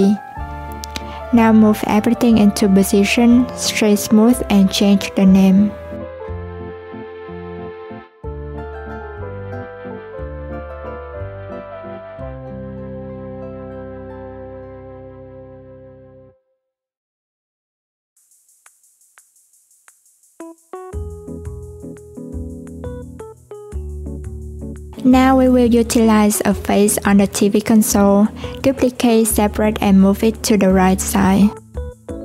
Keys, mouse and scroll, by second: 0.0 right click, 1.5 click, 5.1 click, 6.6 click, 7.9 click, 8.8 alt+z, 9.5 click, 12.1 click, 13.2 click, 14.6 click, 17.8 click, 19.7 click, 20.9 click, 22.1 click, 22.2-24.3 drag, 25.0 click, 26.0 Tab, 27.3 3, 27.7 click, 29.0 shift+d, 30.4 p, 31.3 Tab, 31.6 click.